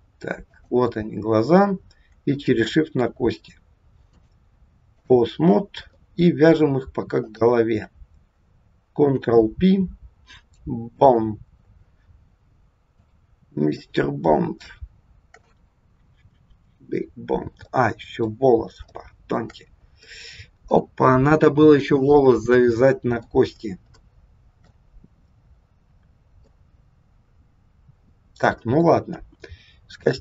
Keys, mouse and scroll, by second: 0.4 click, 2.3 shift+click, 4.0 click, 6.0 middle click, 8.9 ctrl+p, 11.9-12.9 scroll down 3, 12.9 click, 14.3 scroll down 1, 14.7 shift+middle click, 17.0 scroll down 1, 17.8 middle click, 18.5-19.5 scroll up 3, 18.9 shift+middle click, 19.6 scroll up 1, 20.2 middle click, 23.5 scroll down 2, 23.9 shift+middle click, 26.4 middle click, 29.2 KP_1.